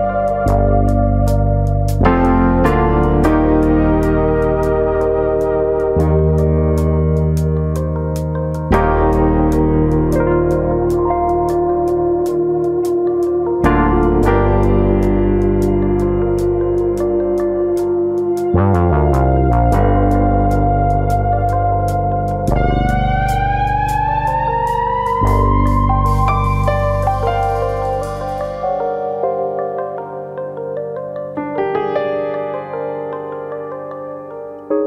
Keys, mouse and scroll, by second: 0.0 click, 0.0 middle click, 0.9 middle click, 1.6 click, 2.6 ctrl+z, 2.8 middle click, 3.6 click, 4.7 middle click, 5.4 click, 6.8 middle click, 6.8-7.9 scroll up 2, 7.0 shift+middle click, 8.8 click, 9.9 ctrl+click, 11.7 shift+middle click, 11.9 scroll up 2, 12.2 shift+middle click, 12.5 middle click, 13.2 click, 13.7 ctrl+click, 14.7 click, 15.3 middle click, 15.9 middle click, 17.1 click, 18.6 click, 21.5 click, 21.5 middle click, 23.1 1, 23.4 click, 23.6 middle click, 24.1 click, 24.8 middle click, 25.5 click, 25.7 middle click, 26.2 click, 26.8 middle click, 27.2 middle click, 27.5-27.9 scroll down 3, 27.6 Tab, 27.9 middle click, 28.2 scroll down 2, 28.4 middle click, 29.0 middle click, 29.4 click, 30.0 l, 31.0 Tab, 31.4 click, 32.2 l, 33.0 alt+s.